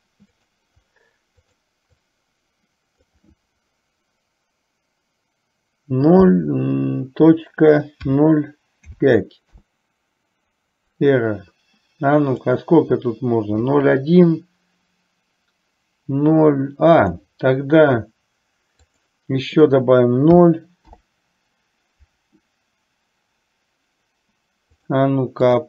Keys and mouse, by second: 0.5-9.6 drag, 12.5 click, 17.1-21.2 drag, 25.0-25.6 drag.